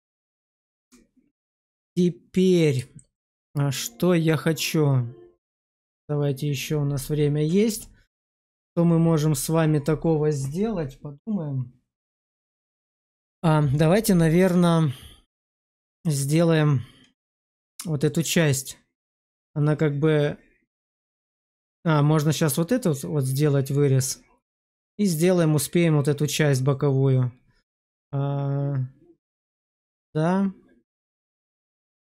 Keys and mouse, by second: 2.9 shift+middle click, 3.7-5.3 middle drag.